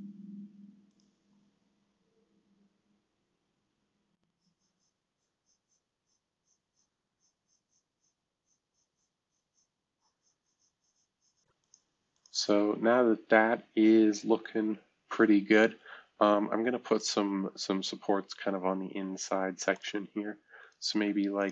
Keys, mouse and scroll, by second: 5.3 click, 5.6-6.0 drag, 6.4 click, 7.1 click, 7.4 click, 7.6 click, 7.9-8.3 drag, 8.4 drag, 8.6 drag, 8.9 click, 9.4 drag, 9.9 click, 10.3 click, 10.5 click, 10.7 click, 10.8 drag, 11.1-14.1 drag, 14.1-19.4 right drag, 19.7-20.7 drag, 21.4 click.